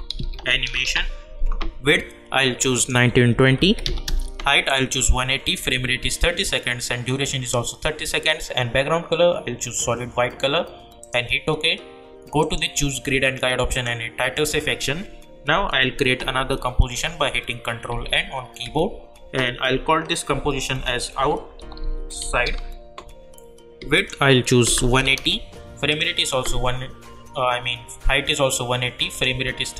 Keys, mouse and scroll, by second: 0.0-1.4 typing, 2.7 click, 11.0 click, 17.9 ctrl+n, 20.5-22.9 typing, 23.9 click, 29.1 click.